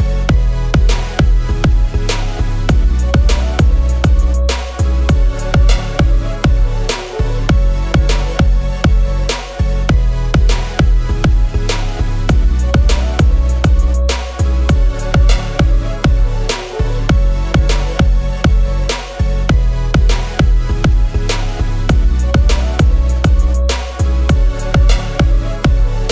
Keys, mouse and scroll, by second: 0.7-1.3 typing, 5.3 shift+click, 6.4 ctrl+g, 8.0-8.4 scroll, 9.0 scroll down 1, 9.8 ctrl+-, 11.2-11.6 scroll, 14.6-15.1 typing, 17.5-20.1 typing, 23.4-24.2 typing.